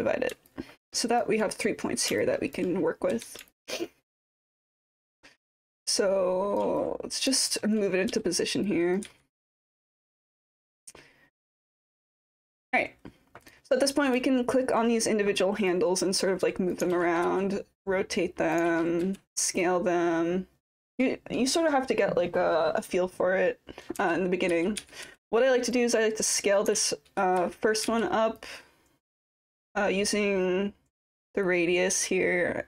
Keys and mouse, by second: 0.5 alt+click, 2.2 alt+click, 3.1 e, 3.5 alt+click, 4.4-6.6 drag, 6.8 alt+click, 7.5 click, 8.1 w, 8.6 click, 9.1 e, 9.4 click, 10.1 w, 11.0 click, 12.0 click, 13.4 click, 14.4 alt+middle click, 14.6 alt+click, 15.7-16.7 drag, 16.9 ctrl+z, 17.8 click, 18.7 ctrl+z, 19.0 r, 19.6-20.7 drag, 20.9 ctrl+z, 25.7 click, 26.7 ctrl+z, 27.4 w, 27.8 e, 28.4 click, 30.2-32.6 drag.